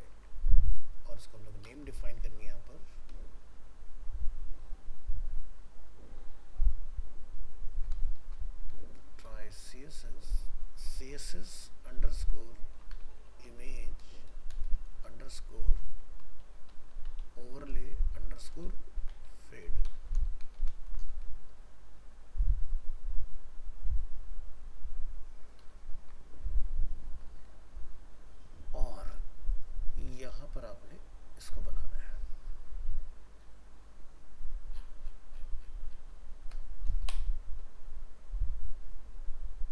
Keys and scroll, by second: 0.1 ctrl+Tab, 3.4 ctrl+shift+Left, 20.8 ctrl+c, 25.6 ctrl+v.